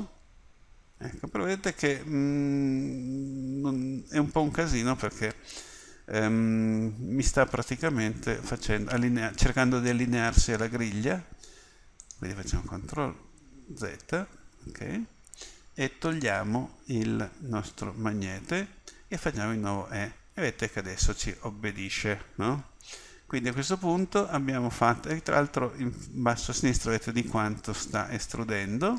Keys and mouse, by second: 13.7 ctrl+z, 16.2 click, 19.3 e.